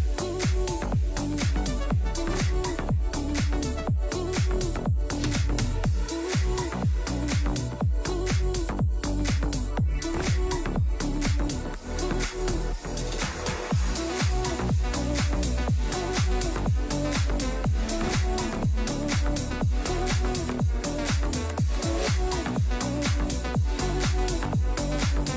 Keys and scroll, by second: 21.4 ctrl+s.